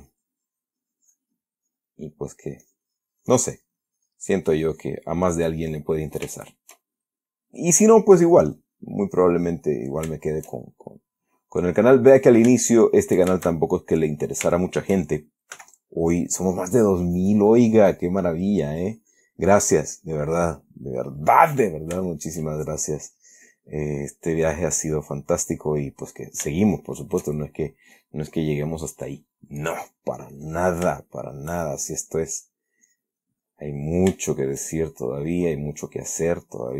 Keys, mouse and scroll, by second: 0.1-2.4 drag, 2.4 middle click, 2.9-5.8 drag, 6.0 click, 6.7-7.6 shift+middle drag, 7.8-8.3 shift+middle drag, 8.6 click, 9.5 click, 10.5 shift+middle click, 11.1-11.6 shift+middle drag, 12.8-13.4 shift+middle drag, 13.7-14.6 shift+middle drag, 14.9 shift+middle click, 15.9 f, 16.4 click, 17.0-18.5 drag, 18.7-20.0 drag, 20.1 click, 21.1-21.7 middle drag, 21.9-22.8 middle drag, 23.2-24.3 drag, 25.1-26.2 drag, 26.4-26.9 middle drag, 27.0 shift+middle click, 27.4 shift+middle click, 28.1-28.6 shift+middle drag, 29.9 click, 30.6 click, 31.4-31.9 shift+middle drag, 32.8-34.3 drag, 34.6 shift+middle click, 36.1 click.